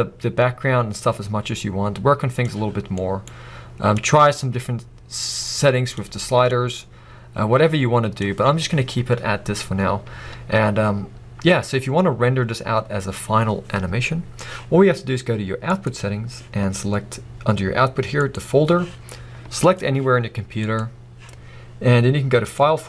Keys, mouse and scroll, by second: 1.2 click, 4.0-8.4 drag, 8.6 scroll down 1, 9.7 scroll up 1, 18.3 click.